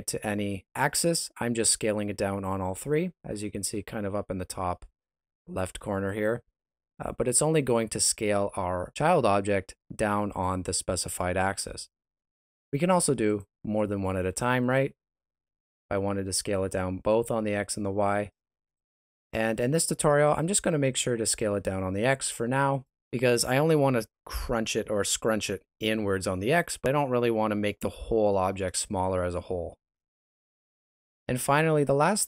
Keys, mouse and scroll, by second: 11.3 right click, 13.2 click, 14.6 right click, 15.2 s, 18.7 right click, 20.2 click, 21.2 right click, 21.6 s.